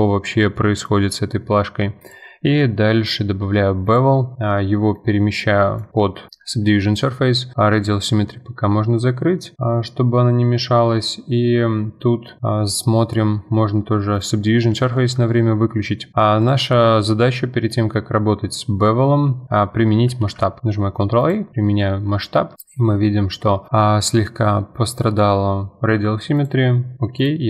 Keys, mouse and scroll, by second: 1.1-1.6 scroll up 2, 1.6-2.0 scroll up 1, 2.0-5.8 drag, 6.3 scroll down 1, 6.8 scroll up 2, 7.8-10.2 drag, 12.4 middle click, 12.6-13.6 scroll up 1, 13.6-14.1 scroll up 1, 14.1 click, 15.0-15.3 shift+middle drag, 15.2 scroll up 2, 16.4 click, 20.2 ctrl+a, 22.5 scroll down 4, 23.0-25.8 middle drag, 26.3-27.4 drag.